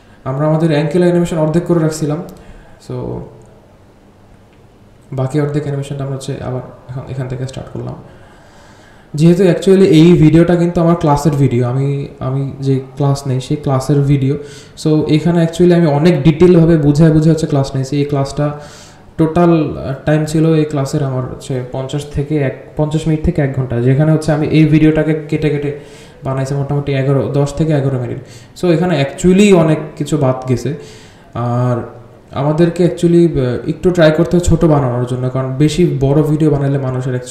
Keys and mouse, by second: 12.2-16.1 drag, 24.1 r, 25.7-29.4 drag, 30.0 r, 33.7-36.3 drag, 36.9 r.